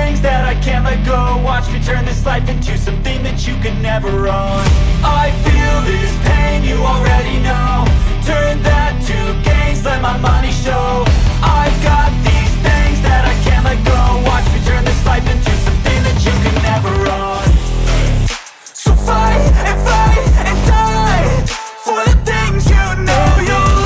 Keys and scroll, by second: 0.2-5.3 typing, 10.6-16.2 typing, 14.2 Return, 15.8 Return, 16.5 Return, 17.4 ctrl+s, 20.8 Return, 21.6 s, 22.5 BackSpace, 22.9 shift+8.